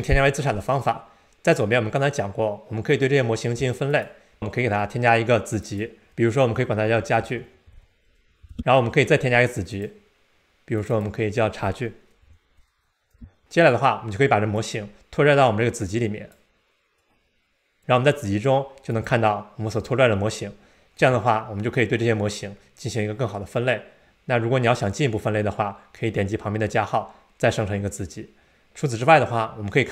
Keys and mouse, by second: 3.9 click, 5.5-8.9 drag, 6.1 BackSpace, 9.7 click, 11.0-13.7 drag, 14.5-16.3 drag, 17.0 click.